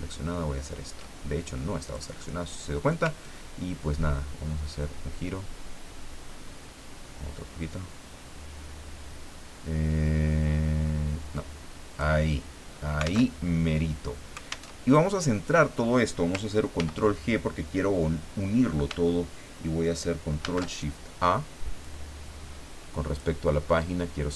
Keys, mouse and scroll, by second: 1.8 click, 3.2-12.4 ctrl+drag, 13.3 alt+Tab, 14.7 alt+Tab, 16.8 ctrl+g, 20.4 ctrl+shift+a, 21.8-23.4 drag.